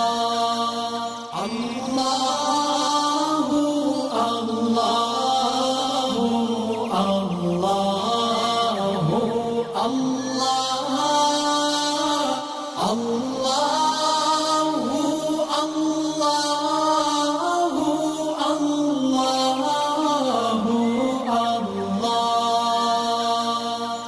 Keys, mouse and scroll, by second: 2.5 alt+scroll up 1, 3.5-4.0 alt+drag, 7.0 alt+scroll down 1, 7.6 click, 8.1 alt+scroll up 1, 8.6 click, 10.9 space, 10.9 click, 11.7-15.4 alt+drag, 16.8 alt+shift+click, 17.0 alt+scroll up 2, 17.2-19.1 drag, 22.3 space, 22.4 click, 22.4 click, 22.7 alt+scroll up 1, 23.1-23.9 click.